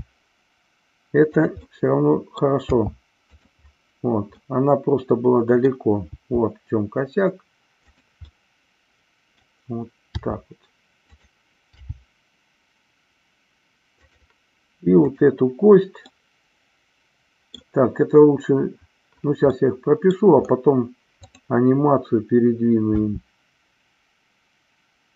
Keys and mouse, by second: 1.7 middle click, 3.3 drag, 4.4-5.5 middle drag, 6.0 g, 8.3-9.4 middle drag, 10.2 r, 11.2 click, 11.7 g, 13.9 click, 14.9-16.0 drag, 16.0-17.5 middle drag, 19.5 middle click, 22.9 g.